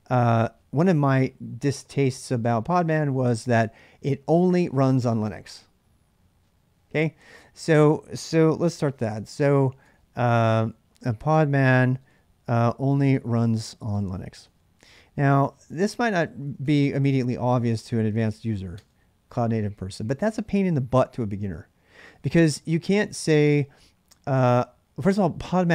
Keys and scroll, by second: 8.3-19.7 typing.